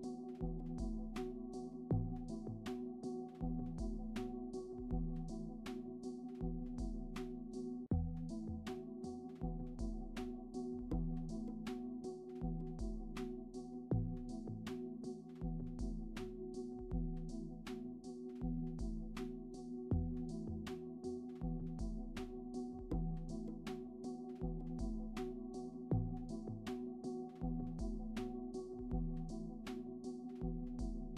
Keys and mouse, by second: 1.1 r, 1.9 g, 2.2 g, 2.6 g, 3.2 click, 3.6 click, 5.7 ctrl+s, 7.3 click, 14.0 alt+shift+z, 14.7 alt+shift+z, 16.2 click, 19.7 shift+click, 21.4 click, 22.1-24.5 shift+drag, 24.9-25.6 middle drag, 26.6 r, 28.2-29.3 drag, 29.6 g.